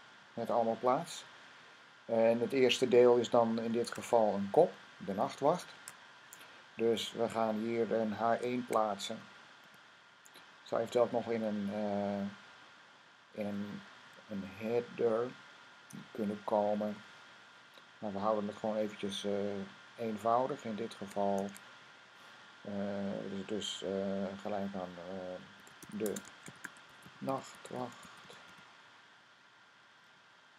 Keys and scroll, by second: 0.8 Up, 3.6 Tab, 5.5 super+Tab, 5.7 super+Tab, 8.4 typing, 9.5 typing, 21.2 shift+., 25.4-28.8 typing.